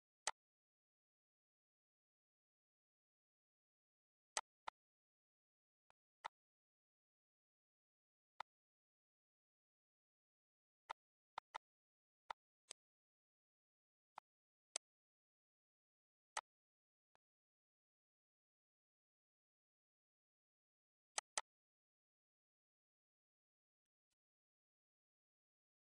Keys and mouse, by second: 0.4 click, 4.6 click, 6.1 click, 8.6 click, 11.1 click, 12.5 click, 14.4 click, 16.6 click, 17.0 z, 17.3 click, 21.4 click, 24.1 click.